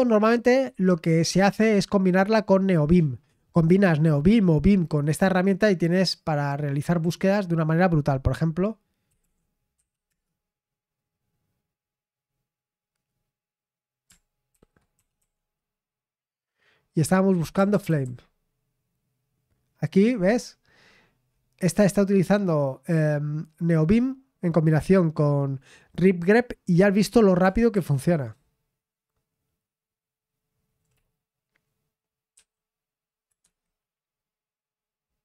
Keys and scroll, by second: 8.8-9.7 typing, 10.1 Return, 14.3-15.7 typing, 17.2-18.5 typing, 21.1 scroll down 1, 21.3-22.1 scroll up 1, 22.1-23.3 scroll up 1, 23.3 scroll up 1, 23.5-24.3 scroll down 1, 27.4 Up, 27.7-30.6 Up, 32.3 q, 33.4 Escape.